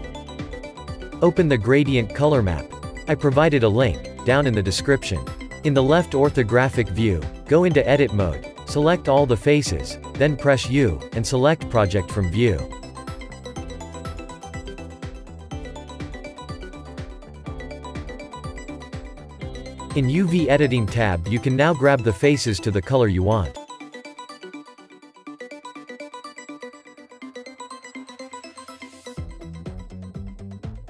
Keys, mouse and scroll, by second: 3.7-6.0 middle drag, 6.0-6.5 scroll up 3, 6.9 click, 8.3-10.6 shift+middle drag, 10.6 Tab, 11.1 a, 13.9 u, 17.9 click, 21.5 click, 23.9-27.6 drag, 27.6 a, 28.6 g, 30.0 s.